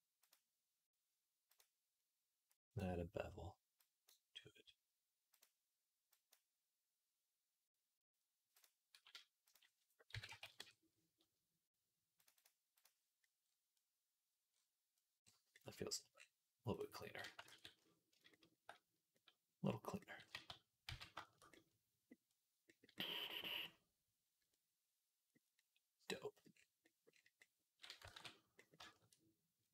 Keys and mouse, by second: 0.1-3.9 drag, 3.9-5.2 middle drag, 5.2 click, 6.2-8.4 middle drag, 8.4-13.6 drag, 13.7-15.4 drag, 15.7 click, 16.6-23.5 middle drag, 17.3 ctrl+s, 20.2 z, 20.7 z, 23.5 click, 23.6 middle click, 23.7 click, 23.8 middle click, 24.4-26.8 middle drag, 27.2-28.6 middle drag, 28.0 ctrl+s, 28.6-29.7 shift+drag.